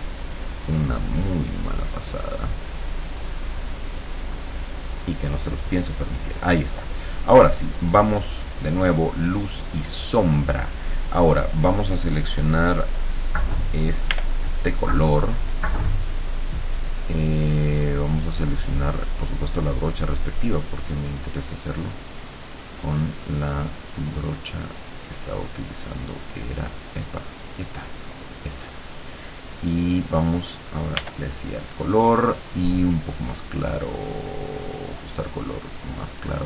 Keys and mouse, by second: 8.6 click, 14.2 r, 19.1 click, 22.6 click, 23.6 click, 24.0 click, 25.0 click, 27.4 click, 28.2 click, 31.0 r, 32.6 click, 35.7 click.